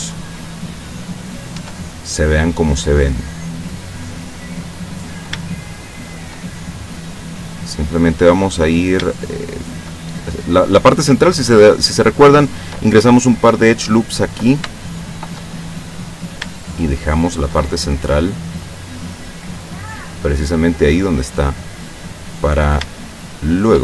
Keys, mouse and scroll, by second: 1.2 right click, 1.6 Tab, 2.4 scroll up 2, 2.8 middle click, 3.0 scroll up 1, 5.1 shift+right click, 5.6 shift+right click, 6.1 shift+right click, 6.7-8.1 shift+drag, 8.6 right click, 9.0 scroll up 1, 9.2 shift+right click, 9.6 shift+right click, 10.3 shift+click, 14.8 shift+middle click, 16.2 shift+right click, 16.7 shift+right click, 17.2 shift+right click, 18.0-21.0 drag, 21.4 middle click, 22.4 right click, 23.0 shift+right click, 23.5 shift+right click.